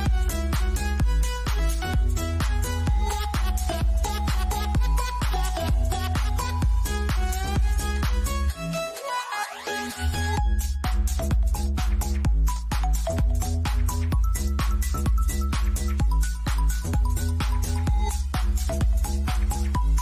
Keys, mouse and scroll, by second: 3.1 scroll down 1, 6.2 ctrl+Num_Lock, 6.2 scroll down 1, 6.4 z, 7.4 click, 9.6 space, 12.0 click, 17.1 click.